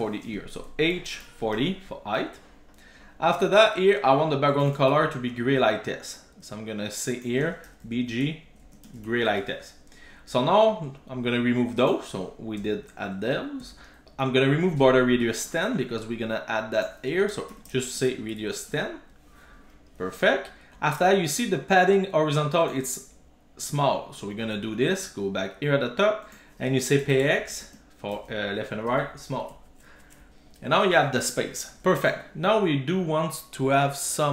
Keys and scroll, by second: 1.6 super+s, 4.8 super+c, 9.1 super+v, 9.5 super+s, 12.7 super+BackSpace, 18.7 super+s, 23.7 super+BackSpace, 28.9 super+s.